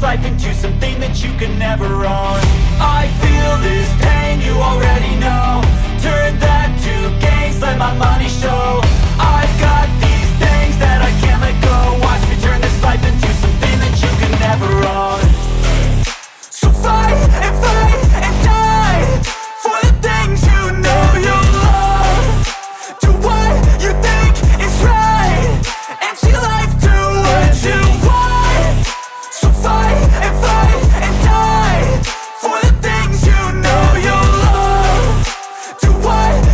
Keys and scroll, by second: 2.1 Left, 2.6 KP_Subtract, 3.0 ctrl+s, 10.2 BackSpace, 11.4 shift+,, 12.2 ctrl+s, 18.6 ctrl+z, 19.0 ctrl+z, 29.2 ctrl+c, 31.3 Down, 32.0 Delete, 32.4 Delete, 34.4 shift+,, 34.7 =, 36.3 BackSpace.